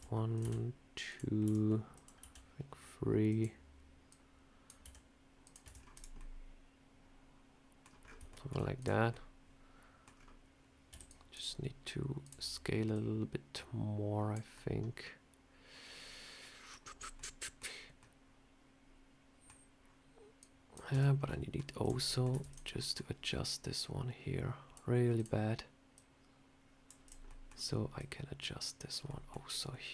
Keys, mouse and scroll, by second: 0.3 s, 1.3 e, 2.0 s, 3.9 click, 4.7 s, 5.5 Tab, 5.6 scroll down 3, 5.8 click, 6.0 middle click, 7.9 scroll up 5, 8.2 shift+middle click, 8.6 click, 9.0 middle click, 10.0 scroll down 2, 10.8 scroll down 1, 10.8 b, 12.1 click, 12.8 click, 14.4 middle click, 16.8 scroll up 3, 17.0 middle click, 17.8 middle click, 20.2 click, 20.8 Tab, 21.0 scroll up 2, 21.1 middle click, 21.7 click, 21.9 middle click, 22.2 Tab, 22.4 click, 22.6 middle click, 23.6 click, 25.0 click, 25.8 click, 26.9 click, 27.1 middle click, 27.8 click, 28.9 middle click.